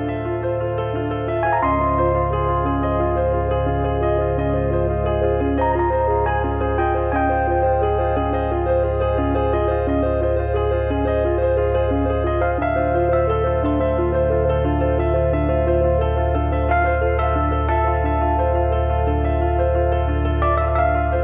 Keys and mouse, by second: 0.6 click, 2.6 click, 5.7 click, 6.0 2, 6.2 click, 8.0 1, 8.3 click, 10.5 middle click, 11.2 alt+z, 11.4 middle click, 12.7 shift+h, 14.9 shift+d, 19.0 middle click.